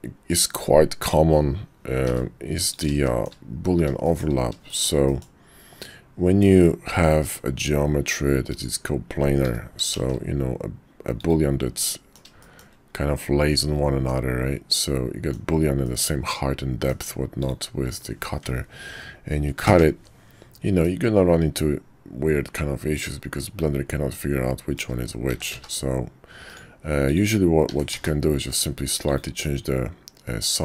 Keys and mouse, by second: 2.0 g, 3.0 shift+middle drag, 4.0 shift+middle drag, 4.7 shift+middle click, 5.1 middle click, 6.8 shift+d, 9.4 g, 11.8-12.2 drag, 12.4 shift+middle click, 13.2-14.1 middle drag, 14.7-15.3 middle drag, 15.8-16.9 middle drag, 17.4 shift+click, 19.6 ctrl+KP_Subtract, 20.8-24.0 middle drag, 24.0-24.8 drag, 25.3 s, 27.7 s, 29.4-30.6 drag.